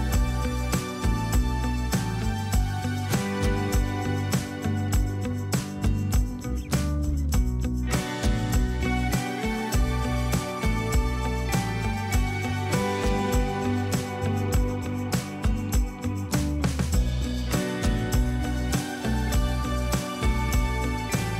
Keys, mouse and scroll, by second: 1.8 ctrl+click, 6.7 ctrl+z, 10.2 v, 11.0 alt+click, 16.1 Return.